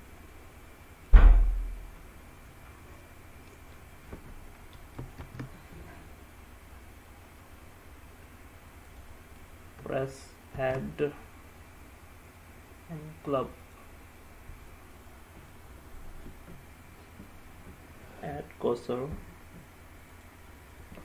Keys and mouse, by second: 0.5-1.4 middle drag, 5.3 shift+a, 10.7 shift+a, 16.6 Tab.